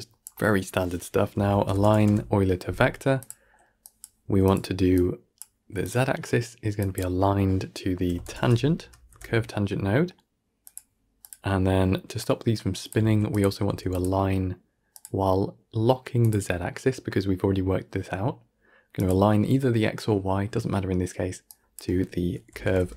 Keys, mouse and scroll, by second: 4.8-5.8 drag, 6.8 click, 11.1-12.8 drag, 12.9 shift+d, 16.2-21.6 drag.